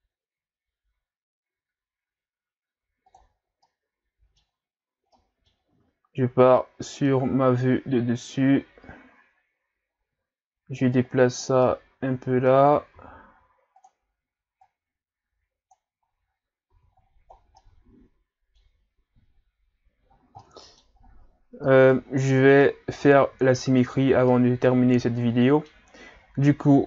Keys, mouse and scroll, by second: 3.5 scroll down 2, 3.7-4.7 middle drag, 4.7-5.1 scroll up 3, 5.1-6.0 middle drag, 6.0-6.6 scroll up 2, 6.6-9.7 middle drag, 10.9 click, 11.6-13.0 middle drag, 13.0 s, 14.6-16.3 drag, 16.3-16.7 scroll down 1, 16.7 a, 17.1-17.6 scroll down 3, 17.6-19.2 middle drag, 19.2-20.4 scroll up 6, 20.4-21.0 middle drag, 21.0-21.8 scroll up 1, 21.8 right click, 22.2-22.6 scroll down 6, 22.6-23.8 middle drag, 23.8-24.3 scroll up 4, 24.3-26.2 middle drag, 26.2-26.8 scroll up 1.